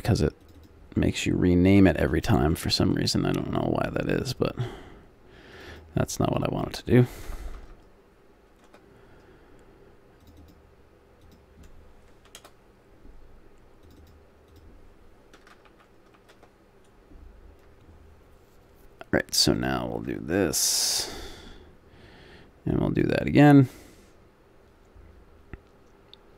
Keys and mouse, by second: 5.5 click, 7.4 BackSpace, 7.5 BackSpace, 15.6 BackSpace, 15.8 BackSpace, 19.5-21.1 drag, 20.0 Tab, 21.1-26.3 middle drag.